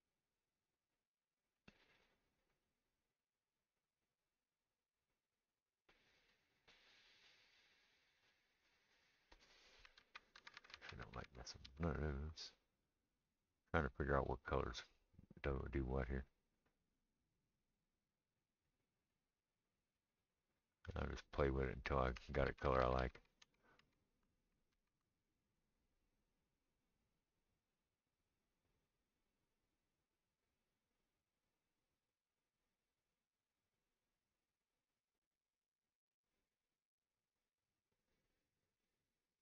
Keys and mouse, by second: 0.6-1.6 middle drag, 1.6-13.4 drag, 10.0 ctrl+z, 10.4 ctrl+z, 10.7 ctrl+z, 10.8 ctrl+z, 11.0 ctrl+z, 11.4 ctrl+z, 11.7 ctrl+z, 13.4-16.2 middle drag, 15.7-25.6 drag, 22.5 ctrl+z, 22.7 ctrl+z, 22.8 ctrl+z, 23.0 ctrl+z, 23.2 ctrl+z, 23.5 ctrl+z, 23.8 ctrl+z, 24.8 ctrl+z, 25.6-26.4 middle drag, 26.4-34.6 drag, 34.6-35.4 middle drag, 35.4-39.4 drag.